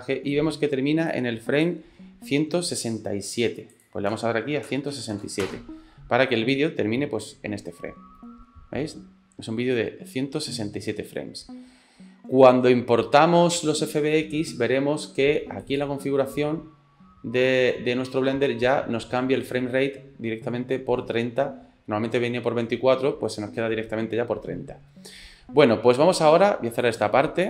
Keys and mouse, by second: 1.2 click, 3.8-5.9 drag, 6.6-8.2 drag, 8.6 click, 9.3 click, 9.6-13.8 drag, 15.6 click, 26.9 click.